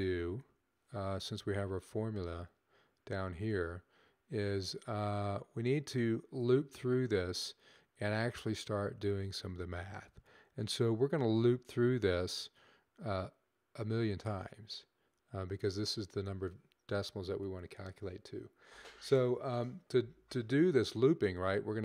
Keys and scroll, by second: 0.7 Up.